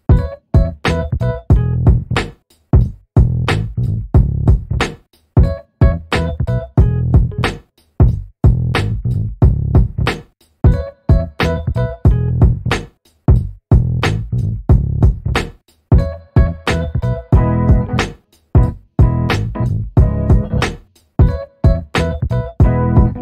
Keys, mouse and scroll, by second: 0.9 shift+click, 4.1 ctrl+KP_Divide, 7.5 click, 8.0 click, 9.9 click, 10.8 click, 11.7 click, 13.1-13.8 shift+drag, 14.7 ctrl+g, 16.0 ctrl+d, 17.4 ctrl+shift+g, 18.9 ctrl+KP_Add, 21.1 ctrl+d, 22.5-23.2 shift+drag.